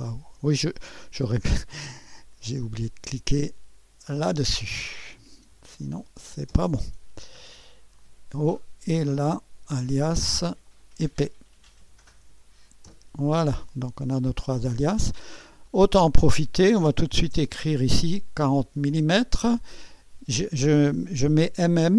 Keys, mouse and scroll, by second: 0.3 BackSpace, 1.2 Delete, 1.9-3.0 drag, 4.1 click, 5.5-6.7 typing, 8.0 click, 10.6 click, 11.5-12.8 typing, 12.9 Return, 15.0-16.7 drag, 16.6-19.6 typing.